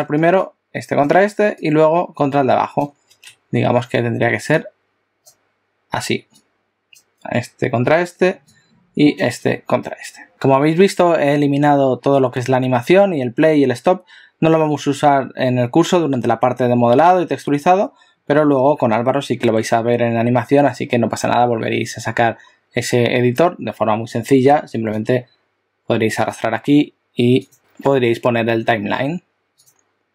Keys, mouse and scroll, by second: 9.2 click, 25.1 click, 27.5 click.